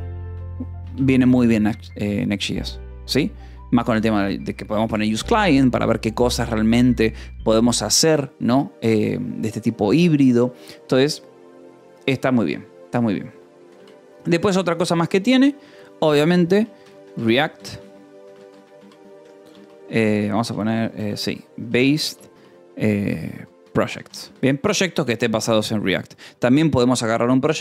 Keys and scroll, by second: 0.6 BackSpace, 0.8 Escape, 13.5 ;, 13.7 space, 17.2-24.3 typing, 25.6 ctrl+s.